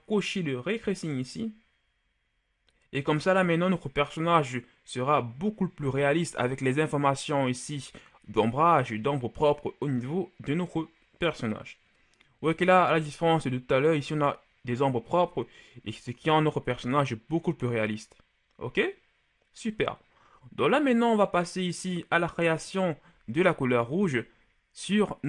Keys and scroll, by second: 12.3 KP_1.